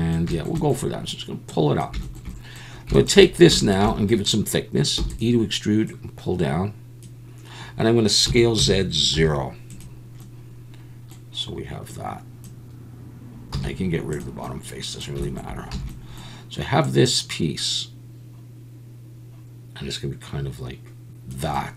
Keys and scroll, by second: 5.0 e, 8.3 s, 8.6 z, 9.1 0, 13.5 x, 15.7 a.